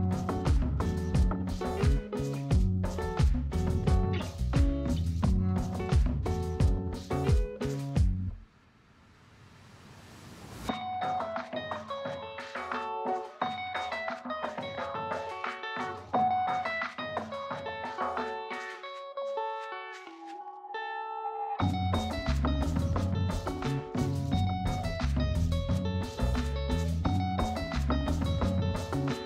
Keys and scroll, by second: 12.5 space, 14.9 space, 19.8 space, 21.6 space, 25.4 space, 28.9 space.